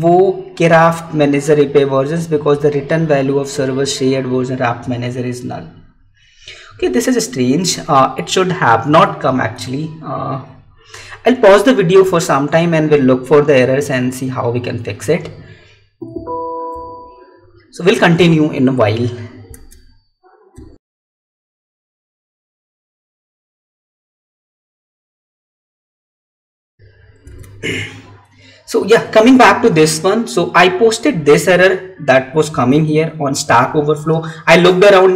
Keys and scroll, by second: 19.5 alt+Tab, 27.3 Tab, 32.6 Tab.